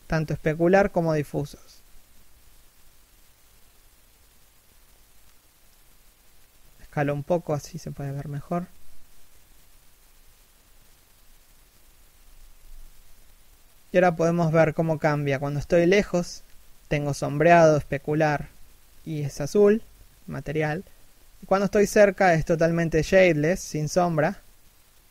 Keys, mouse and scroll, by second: 0.1 r, 1.6 scroll down 1, 2.3-3.3 scroll up 1, 4.3 scroll down 1, 7.0-8.6 scroll up 1, 9.3 scroll down 1, 9.9 scroll up 1, 11.6 scroll down 1, 13.6 s, 14.8 scroll up 1, 15.9 right click, 16.3 shift+middle click, 16.5 r, 17.7 right click, 19.8 scroll up 1, 20.8 scroll down 1, 20.9 shift+middle click, 21.6 0, 22.3 right click, 22.5 g.